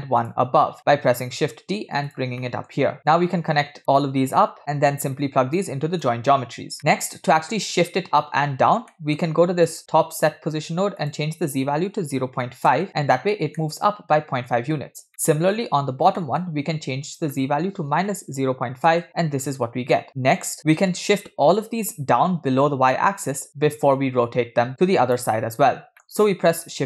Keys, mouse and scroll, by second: 0.2 click, 0.9 shift+d, 2.5 middle click, 3.1 click, 3.4-3.9 drag, 4.7-5.3 alt+right drag, 5.6 alt+right click, 6.8 middle click, 8.9 middle click, 9.3-9.6 scroll up 2, 9.7 click, 10.6 scroll up 1, 11.0-12.8 drag, 13.6 middle click, 15.1-15.6 middle drag, 16.2-16.6 middle drag, 17.1-19.0 drag, 20.0 middle click, 20.1 scroll down 4, 24.7-25.3 drag, 25.9 middle click, 26.3 shift+a.